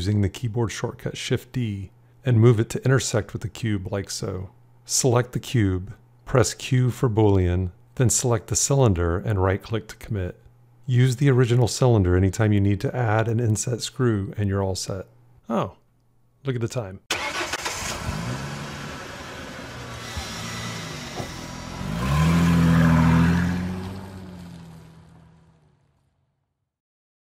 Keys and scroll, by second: 0.5 shift+d, 7.9 q.